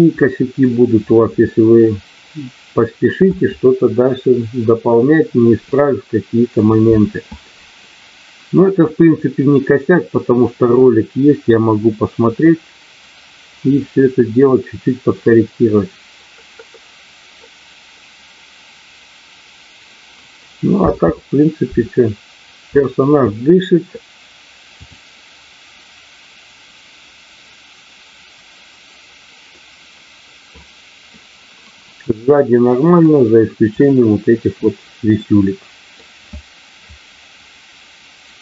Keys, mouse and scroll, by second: 20.8 space, 24.7 click, 29.4 middle click, 32.3 middle click, 35.0 middle click.